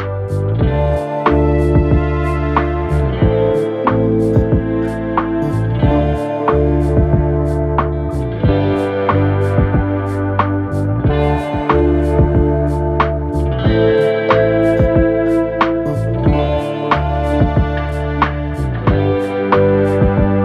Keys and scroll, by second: 13.3 ctrl+z.